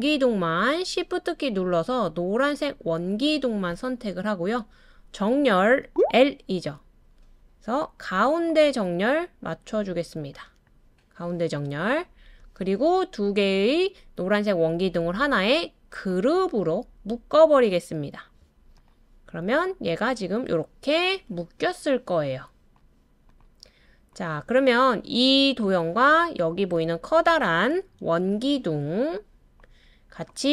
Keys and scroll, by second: 5.9 l, 28.0 super+z.